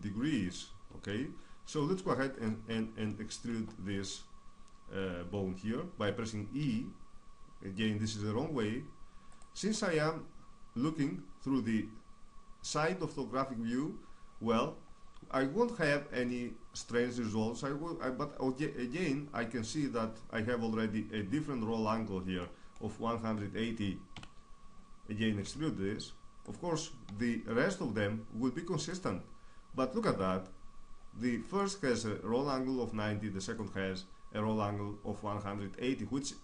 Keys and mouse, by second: 0.7-2.0 middle drag, 2.0-4.4 drag, 4.4-7.1 middle drag, 6.2 e, 9.0-12.8 drag, 15.9-17.8 middle drag, 22.0-23.8 middle drag, 23.8 KP_3, 25.1 e, 26.1-28.4 drag, 26.6 e, 28.4-31.0 drag, 31.0 right click, 33.0 right click.